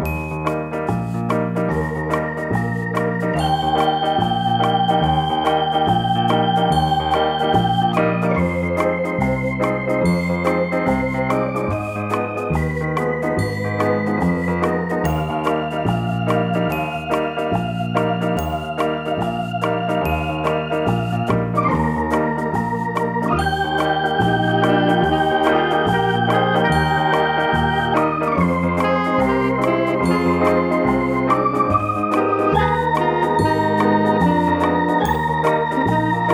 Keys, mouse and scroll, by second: 0.1 click, 0.5 right click, 0.8 middle click, 1.5 shift+right click, 1.8 x, 4.0 KP_7, 4.7-5.0 scroll up 1, 5.0-6.4 shift+middle drag, 5.5 z, 6.4 click, 6.7-7.8 shift+middle drag, 7.0-7.8 scroll up 2, 7.8 click, 8.2 shift+middle click, 9.0 b, 14.4-15.4 middle drag, 14.4 x, 16.0-30.8 middle drag, 16.5 Tab, 18.3 r, 20.2 KP_Enter, 21.4 scroll up 2, 21.6 Tab, 22.7-23.1 scroll up 2, 23.1 a, 24.5 s, 27.0 click, 27.2-27.8 scroll up 2, 27.8 scroll up 1, 27.8 Tab, 28.9 ctrl+a, 29.9-30.5 scroll down 2, 30.5-30.8 scroll down 1, 30.8 shift+d, 31.6 click, 31.9 shift+d, 32.9 click, 33.1-34.5 shift+middle drag, 33.4-34.0 scroll up 2, 34.5 right click, 34.8-36.3 shift+middle drag, 35.2-35.6 scroll up 2.